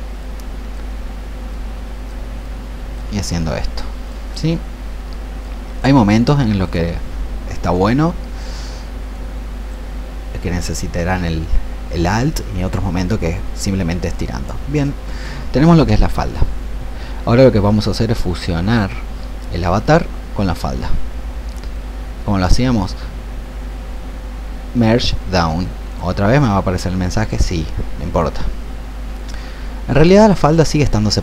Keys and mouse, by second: 0.1 click, 1.4 alt+click, 2.4 alt+click, 3.4-29.7 drag.